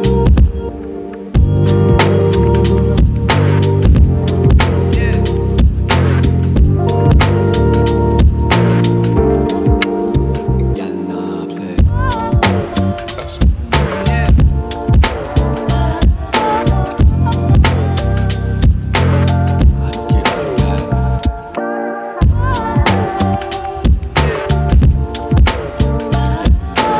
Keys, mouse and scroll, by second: 1.6 g, 1.9 z, 5.6 click, 6.5-7.8 scroll down 1, 7.8 Tab, 7.8-8.5 scroll down 1, 8.9-11.9 right drag, 13.2 shift+r, 14.3 shift+r, 16.1 shift+r, 18.2 ctrl+z, 22.0 Tab, 25.3 click, 25.9 click.